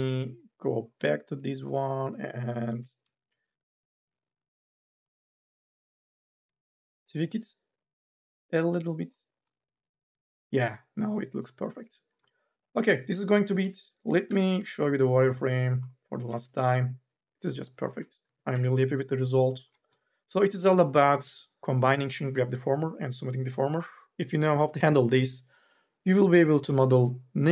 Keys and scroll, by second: 0.8 1, 2.5 e, 13.2 5, 13.4 r, 14.1 n, 18.0 n.